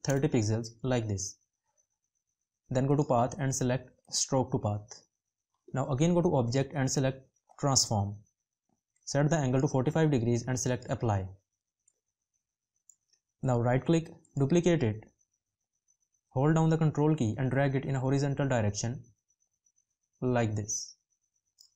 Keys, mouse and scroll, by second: 16.5 ctrl+click.